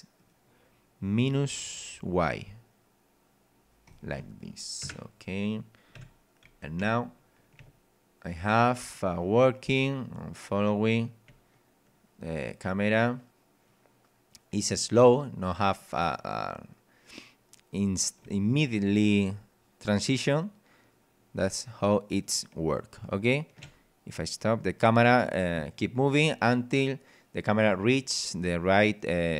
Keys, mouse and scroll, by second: 0.2 right click, 1.6 click, 3.8 click, 4.8 KP_0, 5.8-6.2 scroll down 2, 6.0 p, 6.8 w, 7.6 d, 11.3 d, 18.2 a.